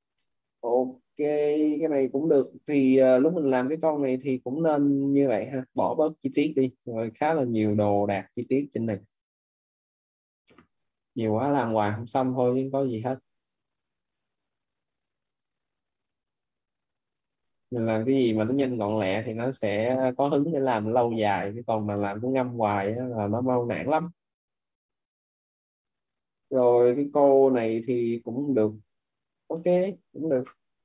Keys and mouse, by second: 0.0 middle click, 0.5 click, 2.2 middle click, 3.4 click, 5.6 middle click, 8.2 middle click, 13.7 click, 20.0 middle click, 20.6 click, 21.7 middle click, 24.4 click, 26.4 middle click.